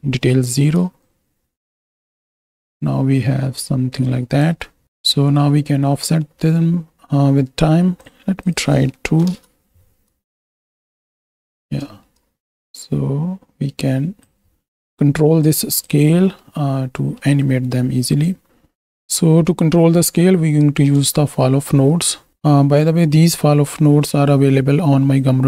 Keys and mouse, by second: 1.1-4.7 shift+drag, 5.4 middle click, 8.4 click, 10.3-11.5 shift+drag, 11.9 middle click, 12.5-14.3 shift+drag, 15.7 click, 16.4-17.2 middle drag, 18.2 click, 20.0 middle click, 21.6 shift+a.